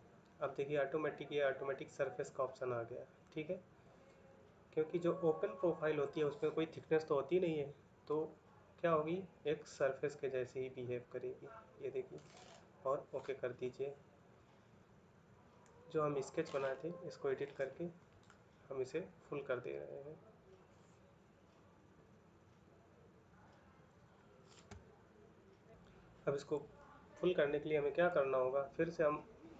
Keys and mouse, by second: 3.0 middle click, 4.0 middle click, 9.8 middle click.